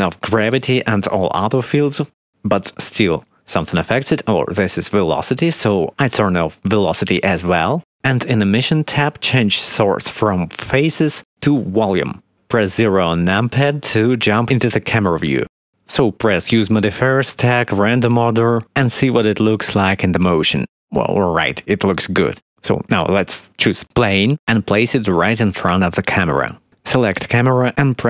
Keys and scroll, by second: 13.4 0, 25.0 g.